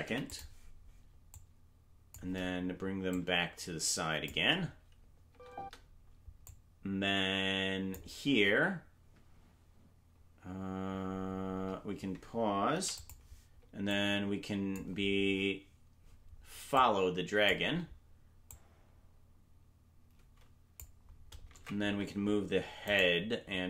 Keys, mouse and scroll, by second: 0.0 i, 1.3 click, 3.1-4.2 drag, 5.2 space, 5.6 space, 6.4-7.9 drag, 13.9 click, 13.9 i, 16.7 click, 18.4-20.8 drag, 21.5 ctrl+Tab, 22.8-23.5 right drag.